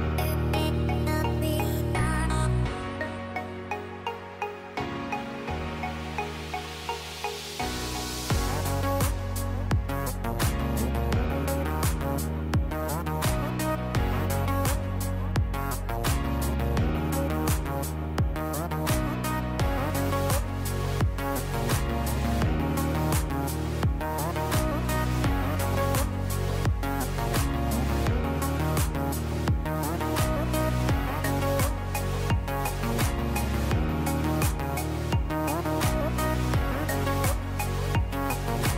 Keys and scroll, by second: 0.4 KP_2, 0.8 KP_Decimal, 1.3 KP_5, 12.2 3, 14.7 shift+Page_Down, 21.2 KP_2, 30.1 shift+Page_Down.